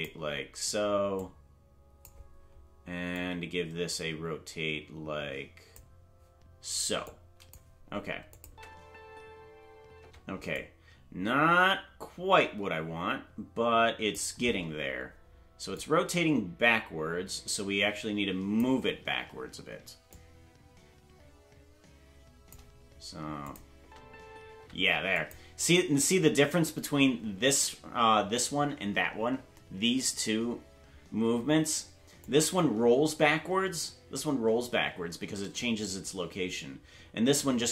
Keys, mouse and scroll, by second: 1.1 click, 3.1-5.7 drag, 7.0 click, 8.3-10.1 drag, 8.4 space, 10.1 space, 10.5-14.1 drag, 15.7-18.6 drag, 20.1-22.5 drag, 23.4 click, 23.8 space, 25.1 click, 25.1 space, 32.2-37.7 drag.